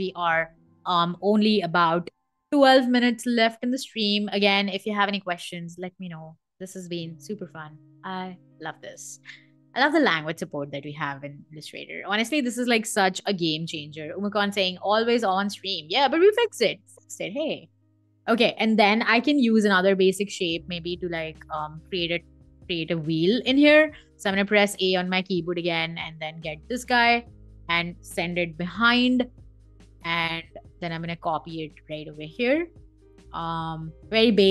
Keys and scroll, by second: 0.0 v, 13.4 super+z, 18.9 m, 23.7 a, 28.3 super+[.